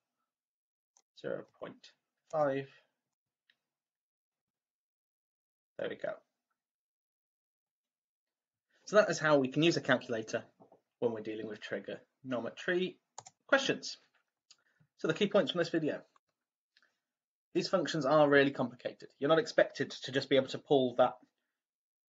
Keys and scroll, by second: 0.9-4.0 typing.